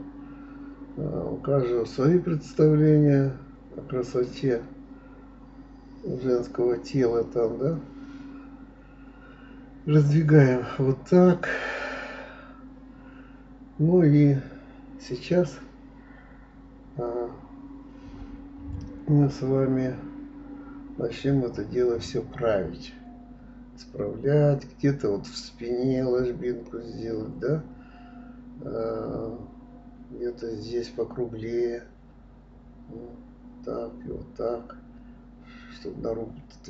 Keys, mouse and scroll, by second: 1.1 click, 1.6-2.6 drag, 3.2 click, 4.2 s, 7.3 ctrl+z, 8.2 g, 10.4-11.9 middle drag, 12.4-14.0 middle drag, 15.7 click, 16.1 shift+click, 16.8 click, 17.0-18.2 middle drag, 18.2 g, 19.0 click, 19.2-20.7 middle drag, 21.1 click, 21.8 g, 23.1-24.6 middle drag, 25.5-27.0 middle drag, 28.2 click, 28.5-29.5 middle drag, 29.5 shift+click, 30.7 s, 32.2 middle click, 32.9 click, 33.5 shift+click, 34.6 s, 36.1 click.